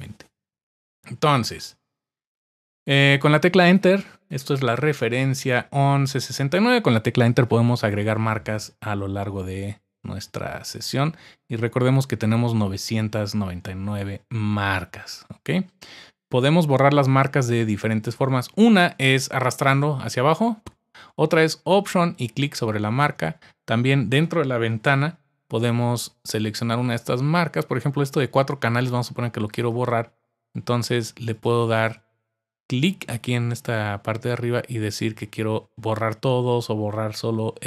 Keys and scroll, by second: 24.7 super+5.